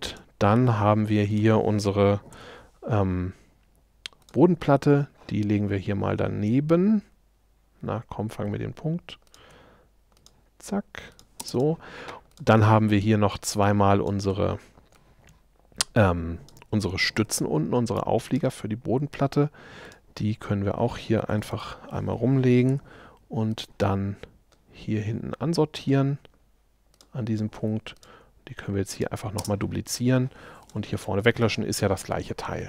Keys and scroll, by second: 2.4 m, 11.5 space, 17.2 q, 21.3 9, 21.7 Return, 29.4 space, 31.0 BackSpace.